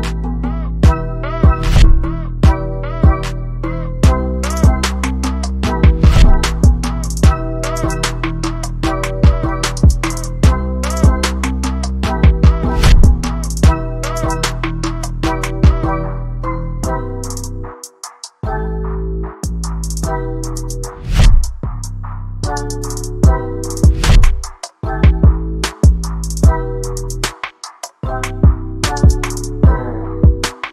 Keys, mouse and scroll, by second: 0.2 middle click, 1.6-1.9 drag, 2.2 middle click, 2.5 click, 9.4 click, 9.9 middle drag, 10.5 click, 11.2 click, 12.5 click, 14.4 middle drag, 15.2 middle click, 15.8 middle drag, 16.4 shift+middle click, 16.8 shift+middle click, 17.4 ctrl+z, 17.9 middle click, 18.5 KP_1, 19.3 click, 19.9 z, 20.3 KP_3, 21.0 z, 21.3 shift+middle click, 22.3 click, 23.4 KP_1, 24.4 z, 25.0 click, 25.4 shift+middle click, 25.7 Tab, 26.0 shift+middle click, 27.1 Tab, 27.6 click, 29.1 KP_1, 29.7 shift+middle click, 30.6 g.